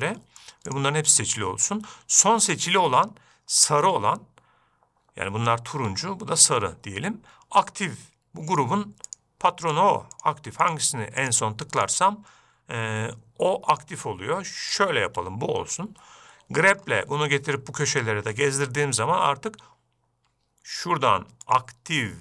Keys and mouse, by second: 0.5-0.8 shift+middle drag, 1.1-1.8 shift+drag, 8.9 shift+click, 9.5 shift+click, 11.0 shift+click, 11.6 shift+click, 15.2-15.6 shift+drag, 22.0-22.2 drag.